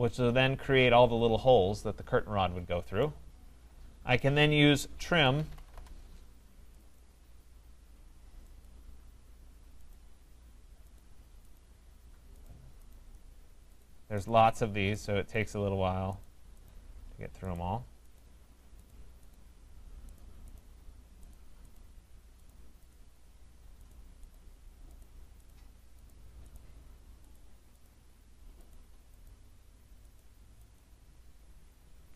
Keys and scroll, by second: 5.7 Return, 32.0 Escape.